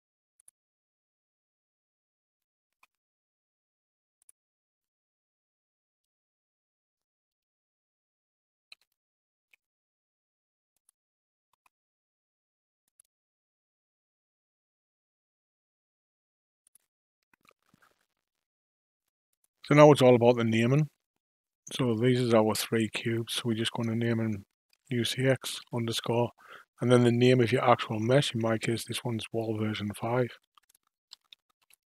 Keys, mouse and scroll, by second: 2.7 s, 8.7 g, 11.5 s, 16.6 click, 19.3 click, 19.9-21.6 scroll down 3, 21.6 click, 22.8 click, 23.0-26.2 drag, 30.5 l.